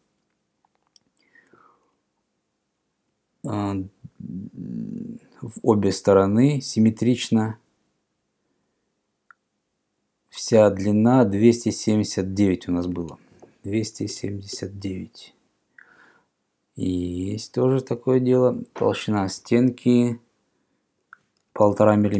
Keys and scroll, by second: 13.6-15.1 typing, 21.8 5.